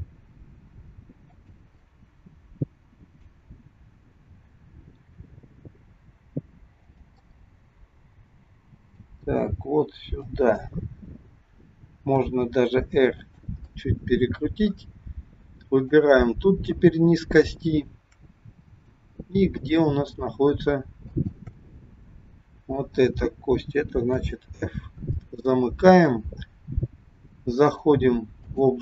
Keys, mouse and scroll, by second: 1.8 middle click, 4.9 g, 7.1 middle click, 9.3 g, 12.2 r, 13.6 middle click, 15.8 click, 18.5 scroll up 2, 18.8 middle click, 21.0 shift+click, 24.0 f, 24.6-25.4 scroll down 3, 25.5 shift+middle click, 27.6 click.